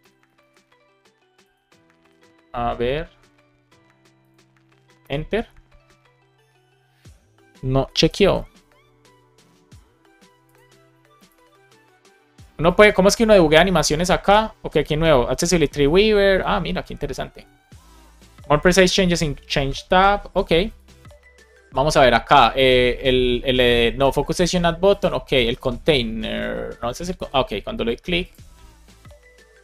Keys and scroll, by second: 0.0 alt+shift+f, 0.3 super+s, 1.9 super+r, 4.9 Return, 8.0 alt+super+i.